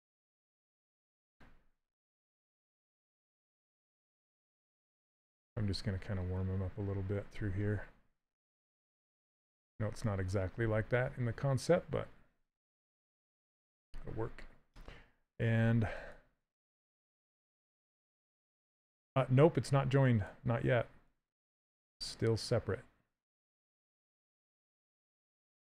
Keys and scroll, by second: 20.7 s.